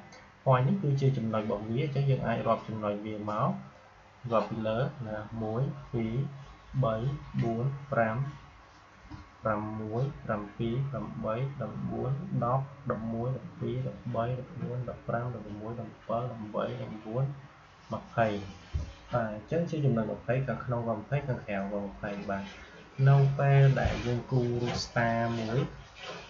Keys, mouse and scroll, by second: 24.6 Delete.